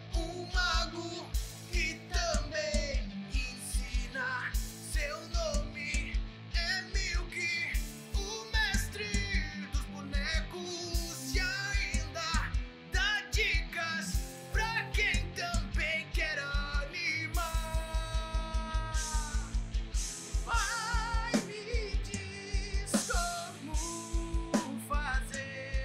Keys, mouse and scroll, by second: 0.0 middle click, 0.4 middle click, 0.5 middle click, 0.6 r, 1.1 click, 1.2 r, 1.5 middle click, 1.7-2.1 scroll down 4, 1.8 middle click, 2.7 click, 3.3-5.3 typing, 6.0 alt+r, 8.2 middle click, 8.7 KP_1, 9.0 scroll up 4, 9.2 scroll down 3, 9.3 scroll down 1, 10.1 click, 10.4-11.0 scroll up 4, 10.5 shift+middle click, 11.3 shift+middle click, 11.6 click, 11.8-12.2 scroll down 4, 11.9 middle click, 12.4 KP_3, 13.0 g, 15.3 KP_1, 15.6 click, 16.3 g, 17.0 shift+click, 17.7 g, 19.0 shift+middle click, 19.4 g, 20.5 g, 20.9 KP_1, 21.1 g, 22.2 middle click, 23.0 KP_1, 23.4 click, 23.9 alt+g, 24.0 middle click, 24.6 KP_1.